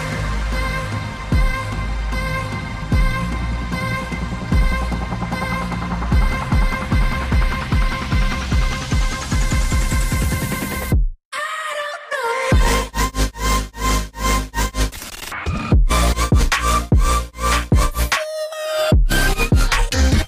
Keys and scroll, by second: 7.5 a, 7.8 g, 13.8 v, 14.0 a, 14.3 g, 15.5 v, 16.2 ctrl+alt+2.